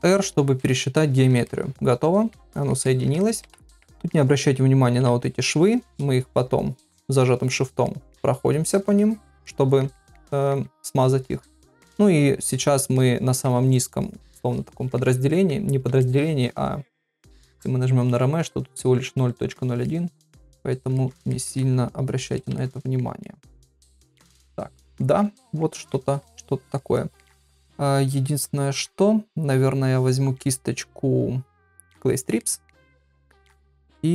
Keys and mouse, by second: 0.1 ctrl+r, 1.0 ctrl+middle click, 1.5 middle click, 2.5 ctrl+middle click, 2.9 ctrl+middle click, 3.2 shift+middle click, 3.6 ctrl+middle click, 3.9 middle click, 4.9 [, 5.0 [, 6.3 shift+click, 6.7 shift+click, 7.2 shift+click, 7.4 shift+click, 7.9 middle click, 8.6 shift+click, 8.9 shift+click, 9.5 middle click, 10.0 ctrl+middle click, 10.3 middle click, 10.9 shift+click, 11.2 shift+click, 11.5 middle click, 12.1 shift+click, 12.5 shift+click, 12.9 middle click, 14.0 shift+click, 14.4 shift+click, 14.7 middle click, 16.0 ctrl+middle click, 17.2-19.7 drag, 19.8 middle click, 20.9 ctrl+middle click, 21.3 middle click, 22.0 shift+click, 22.6 ctrl+middle click, 23.2-24.8 middle drag, 25.0 ctrl+middle click, 25.4 middle click, 26.4 shift+click, 27.0 middle click, 28.1 shift+click, 32.4 middle click, 33.5 [, 33.6 [.